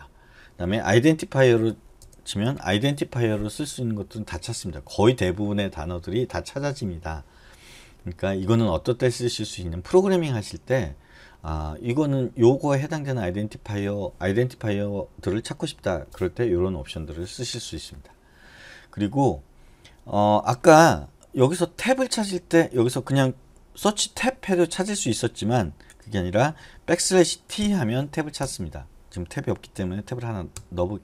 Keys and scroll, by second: 2.2 BackSpace, 2.7 i, 6.7 typing, 22.4 BackSpace, 22.8 BackSpace, 24.0 Tab, 26.1 BackSpace, 27.1-27.7 typing, 28.6 Return, 29.9 i, 30.7 Escape.